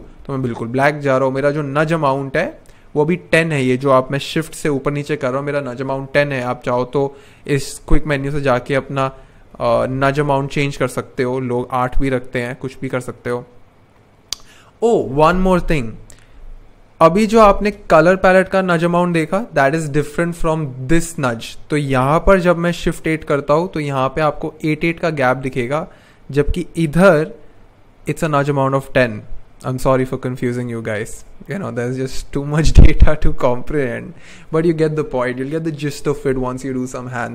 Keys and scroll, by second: 1.4 shift+Page_Up, 1.8 shift+Page_Up, 2.4 shift+Up, 7.8 super+/, 7.8-10.6 typing, 22.6 shift+Up, 23.2 shift+Up, 23.6 shift+Up, 24.4 shift+Down, 24.8 shift+Down, 29.3-30.8 shift+scroll down 1, 31.2-33.5 shift+scroll up 1.